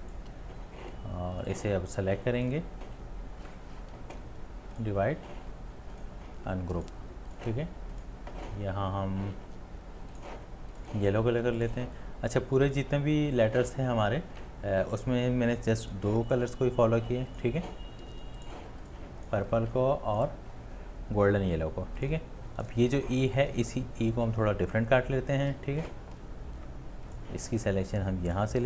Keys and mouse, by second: 0.0 click, 6.0 space, 6.1 right click, 19.0 right click, 19.8-20.2 click, 20.0 click, 20.0 click, 20.1 click, 20.2 click, 20.3 space, 20.4 space, 20.5 space.